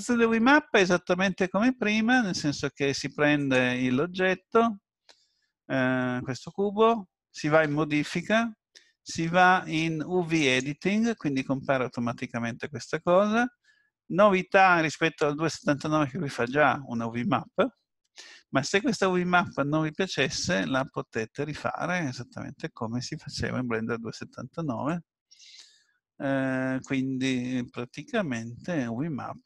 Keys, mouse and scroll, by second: 1.1-2.4 scroll up 4, 2.7-3.4 scroll down 2, 3.4 click, 7.7 Tab.